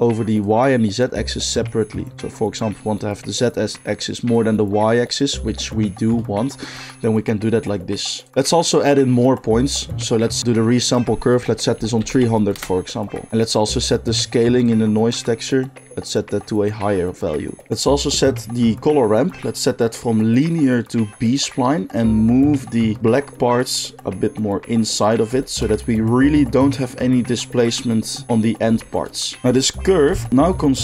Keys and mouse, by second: 0.4-17.7 drag, 12.1 0, 17.7 ctrl+z, 17.7-20.4 middle drag, 20.4-30.8 drag.